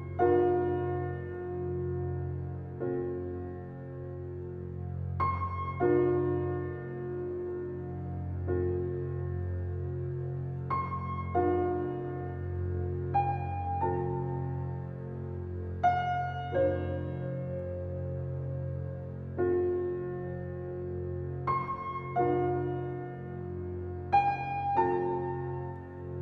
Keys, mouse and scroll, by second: 0.5 s, 3.2 alt+middle click, 4.0 s, 6.2 Tab, 6.5 scroll down 1, 6.7-8.1 middle drag, 8.1 alt+z, 9.3 shift+d, 11.6 shift+d, 12.8 shift+d, 14.5 click, 14.9 shift+click, 15.2 shift+click, 15.6 g, 16.5 click, 16.8-17.3 middle drag, 17.3 click, 17.5-18.4 scroll down 6, 17.9 shift+middle drag, 18.4-19.3 middle drag, 19.3-19.7 scroll down 2, 19.7-20.4 shift+middle drag, 20.4 drag, 21.0-21.4 scroll down 1, 21.4-22.9 middle drag, 23.7-24.2 middle drag, 24.2 click, 24.8 g.